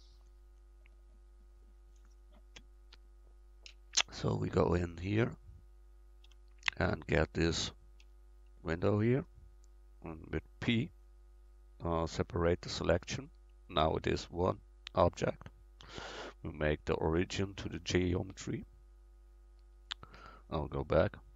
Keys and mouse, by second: 4.2-5.9 right drag, 5.3-8.0 middle drag, 6.3 Tab, 8.0 l, 9.2 middle click, 9.6 click, 10.7 p, 13.8 Tab, 14.4-16.8 drag, 16.9-18.8 drag.